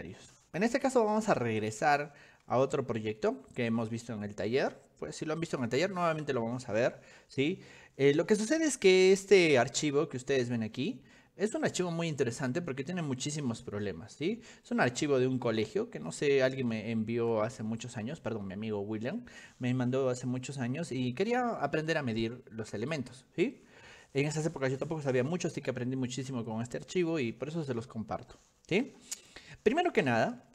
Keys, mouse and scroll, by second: 1.7 click, 2.9-4.9 shift+middle drag, 14.2 middle click, 15.3 shift+middle click, 15.5 shift+middle click, 15.6-17.6 shift+middle drag.